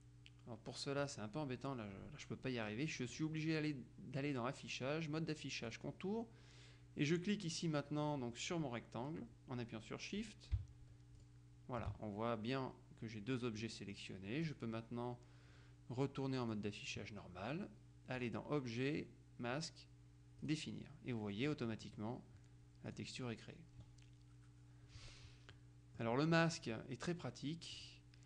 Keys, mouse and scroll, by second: 3.2 click, 5.8 click, 11.2 shift+click, 14.5 click, 16.5 click, 18.3 click, 20.6 click, 21.6-22.6 middle drag, 23.0 click, 25.6-27.0 middle drag, 26.5 click, 27.9 click.